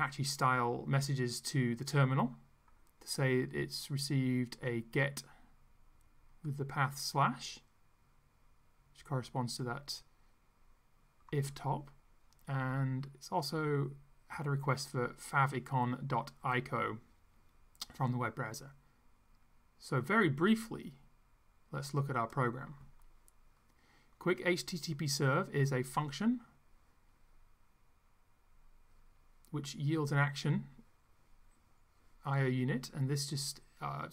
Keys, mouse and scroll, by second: 6.5-9.8 drag, 20.5-22.2 drag.